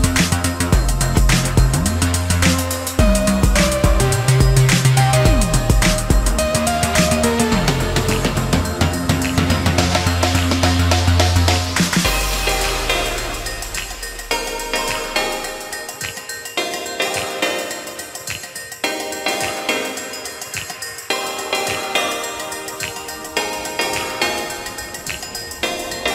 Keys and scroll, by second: 11.8 Delete, 18.5 ctrl+a.